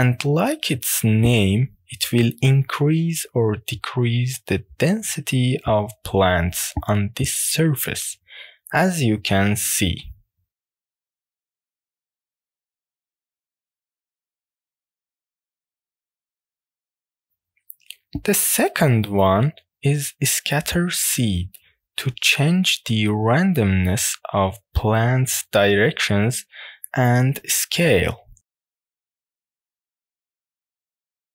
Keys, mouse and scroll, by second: 6.7-11.9 drag, 12.1-13.4 middle drag, 14.0-16.6 drag, 16.9 middle click, 22.4-23.5 middle drag, 24.1-25.2 middle drag, 25.4-26.9 middle drag.